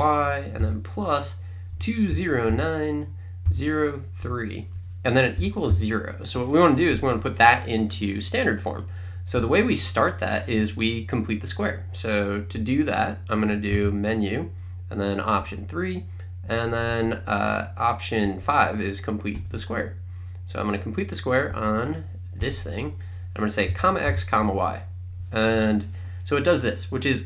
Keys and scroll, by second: 1.5-4.2 typing, 5.4 =, 5.7 0, 6.4 Return, 13.8 Menu, 15.5 3, 16.6 Down, 19.4 Return, 21.5 Up, 22.4 Return, 23.5-24.9 typing, 25.5 Return.